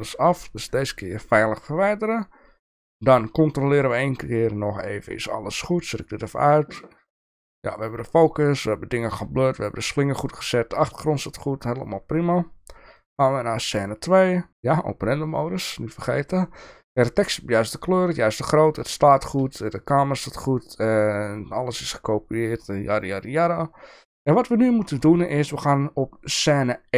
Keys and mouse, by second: 0.0 x, 5.9 click, 12.2 click, 12.9 click, 15.2 click, 22.9 click, 25.2 click.